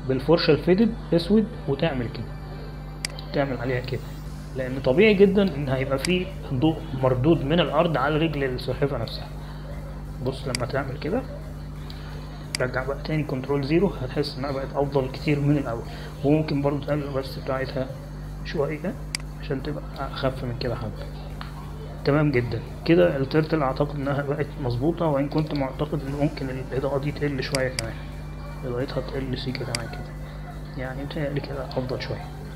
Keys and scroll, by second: 10.2 space, 15.2 ctrl+0.